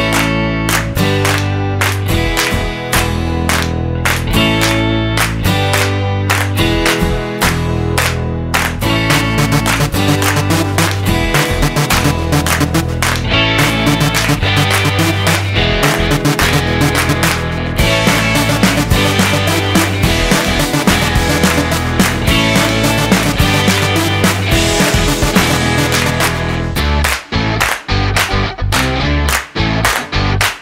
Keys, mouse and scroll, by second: 1.2 click, 3.6 click, 8.5 click, 10.9 middle click, 14.9-15.4 scroll up 1, 15.7 right click, 19.7 click, 21.5 click, 23.4 click, 28.1 shift+a.